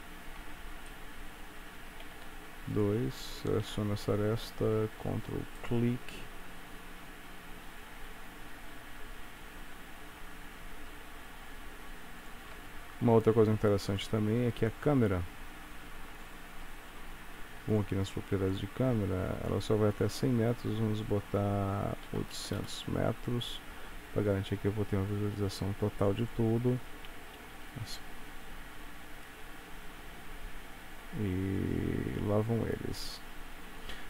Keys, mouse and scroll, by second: 0.5 Tab, 1.0 middle click, 2.2 2, 2.8 click, 3.8 KP_3, 5.6 ctrl+right click, 8.6 g, 12.7 Tab, 14.0 click, 17.8 click, 20.0 click, 22.5 KP_0, 26.3 click, 27.4 space, 33.9 space.